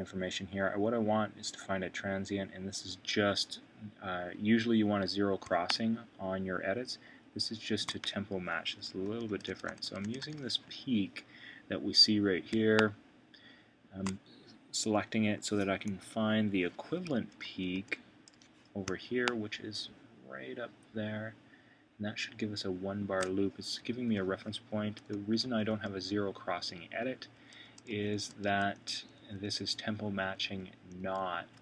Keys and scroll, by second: 8.3 Right, 9.0 super+], 15.8 Left, 17.1 super+[, 23.9 Left, 25.1 super+], 27.0 super+[.